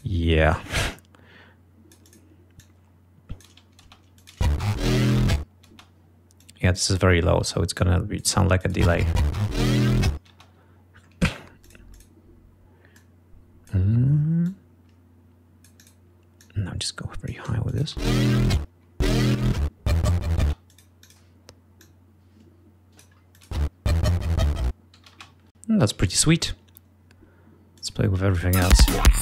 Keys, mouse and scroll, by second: 0.0 ctrl+click, 0.7-2.5 drag, 2.7-3.8 drag, 3.6 space, 4.3 click, 4.8 ctrl+scroll down 2, 5.8 space, 6.5 click, 7.9 click, 8.8 click, 8.9 space, 10.4 space, 10.8 ctrl+scroll down 2, 11.8 ctrl+click, 12.2 click, 13.1 click, 14.6-16.2 drag, 16.5-17.6 drag, 17.8 click, 18.0 space, 18.5-18.9 ctrl+scroll down 2, 20.6 space, 20.8 click, 22.0-23.3 drag, 23.5 click, 23.6 space, 25.1 g, 25.3 space, 25.4-25.9 ctrl+scroll down 2, 27.9 click, 28.5 click, 28.7 space, 28.9 ctrl+scroll up 2.